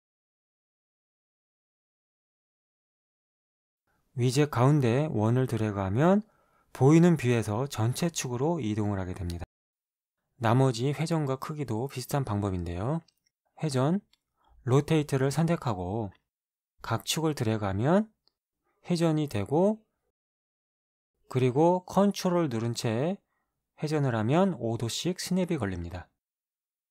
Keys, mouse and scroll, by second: 1.5 click, 6.4-10.2 drag, 14.2 click, 16.9-18.9 drag, 24.3-26.9 ctrl+drag.